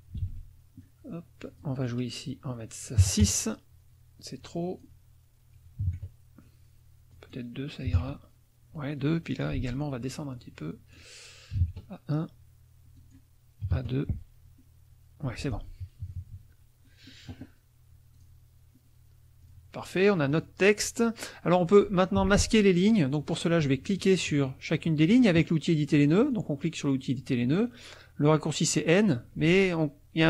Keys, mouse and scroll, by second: 0.2 ctrl+a, 1.4 click, 3.0 KP_6, 3.2 KP_Enter, 4.6 click, 5.8 KP_4, 7.1 click, 7.9 KP_2, 9.3 ctrl+click, 9.5 ctrl+a, 10.7 click, 11.5 KP_1, 11.6 KP_Enter, 12.9 click, 13.6 KP_2, 13.7 KP_Enter, 15.2 F1, 15.4 click, 16.0 KP_Subtract, 16.8 click, 18.1 click, 19.4 click, 20.3 click, 20.8 click, 21.4 middle click, 22.2 F2, 22.9 click, 26.2 click.